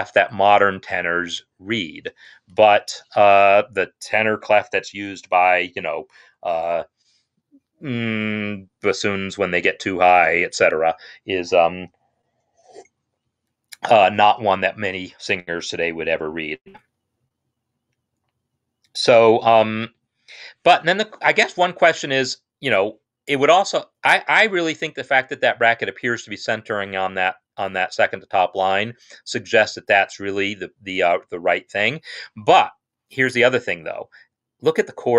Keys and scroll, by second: 2.8 ctrl+z.